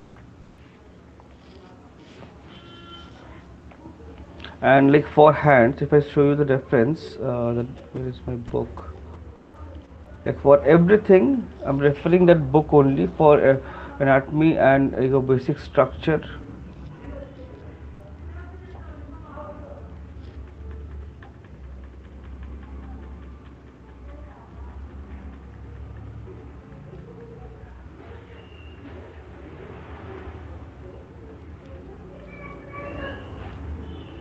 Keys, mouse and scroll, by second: 0.6 alt+click, 1.3 shift+click, 3.9 alt+click, 6.5 click, 8.8 click, 10.0 click, 11.4 click, 11.6 click, 15.5 click, 17.3 right click, 18.6 click, 20.0 click, 20.6 Right, 20.8 Right, 21.2-21.9 Right, 22.1 Right, 22.3 Right, 22.5 Right, 22.7 Right, 22.9 Right, 23.1 Right, 23.3 Right, 23.5 Right, 23.7 Right, 23.9 Right, 24.1 Right, 24.3 Right, 24.5 Right, 24.7 Right, 24.9 Right, 25.1 Right, 25.3 Right, 25.8 Right, 26.0 Right, 26.5 Right, 26.8 Right, 27.2 Right, 27.4 Right, 27.6 Right, 27.8 Right, 28.0 Right, 28.2 Right, 28.4 Right, 28.6 Right, 29.0 Right, 29.2 Right, 29.5 Right, 29.8 Right, 30.1 Right, 30.2 Right, 30.5 Right, 30.7 Right, 30.9 Right, 31.1 Right, 31.5 Right, 31.7 Right, 31.9 Right, 32.3 Right, 32.7 Right, 33.1 Right, 33.3 Right, 33.5 Right, 34.1 Right.